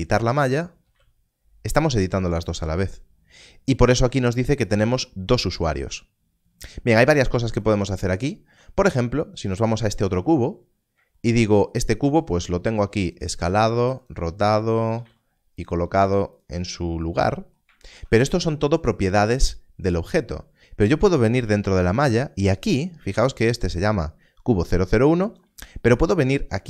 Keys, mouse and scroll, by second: 0.9 z, 2.3 right click, 2.6 Tab, 9.5 click, 10.5-10.9 scroll up 1, 11.9-12.6 scroll down 1, 13.4 z, 14.0 click, 14.9 click, 15.0 z, 15.6 click.